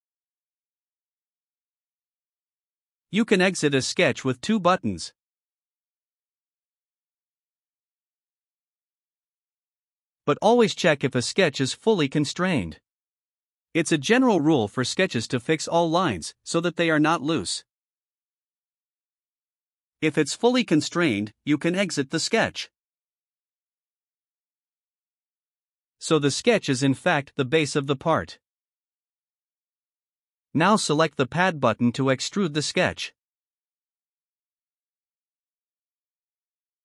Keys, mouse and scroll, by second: 24.3 click, 26.1 middle click, 26.1 scroll down 1, 26.5 right click, 36.6 click.